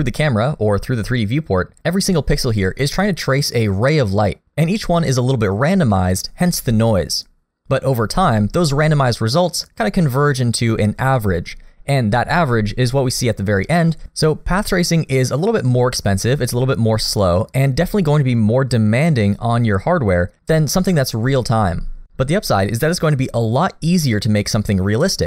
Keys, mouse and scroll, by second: 1.0-2.5 scroll up 2, 5.9 middle click, 7.7-12.0 scroll up 1, 16.5-17.1 scroll up 2, 17.1 middle click, 20.9 middle click.